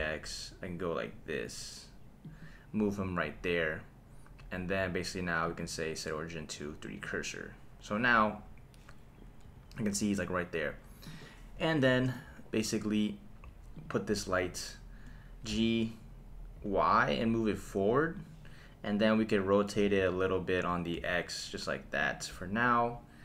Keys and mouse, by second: 0.0 x, 2.2 click, 3.0 KP_1, 5.4-7.0 drag, 8.2 g, 9.4 Escape, 11.0 click, 11.5 KP_1, 13.7 click, 15.5 g, 16.6 y, 18.2 click, 19.8 r, 20.9 x, 22.0 click.